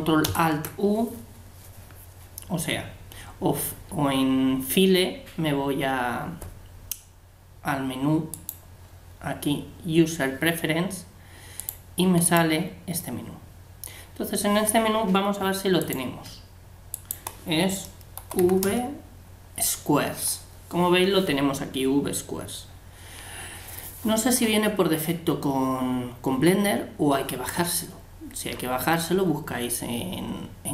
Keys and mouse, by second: 8.3-10.1 ctrl+alt+drag.